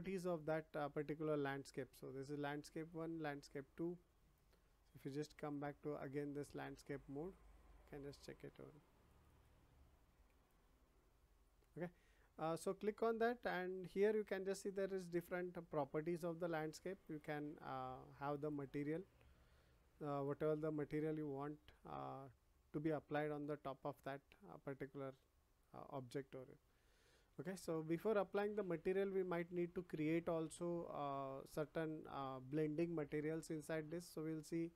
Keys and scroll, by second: 26.8 ctrl+z.